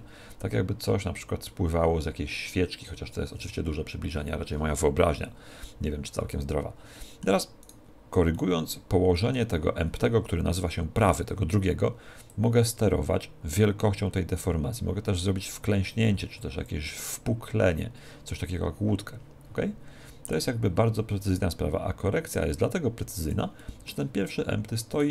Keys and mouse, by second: 6.4-7.6 middle drag, 7.6 right click, 8.4-10.1 middle drag, 12.3 click, 17.0-18.9 middle drag, 21.0 click, 23.6-25.1 middle drag, 25.0 right click.